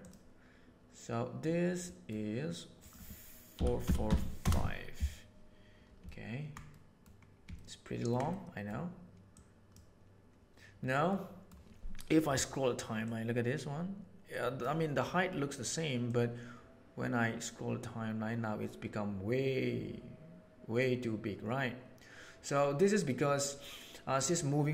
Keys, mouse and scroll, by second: 1.9 middle click, 2.7-4.9 middle drag, 3.8 KP_4, 6.1 ctrl+middle click, 6.7 middle click, 7.5 ctrl+middle click, 8.2 middle click, 9.2 right click, 11.0 middle click, 13.2-14.6 drag, 16.0-23.0 drag, 23.0-24.1 right drag.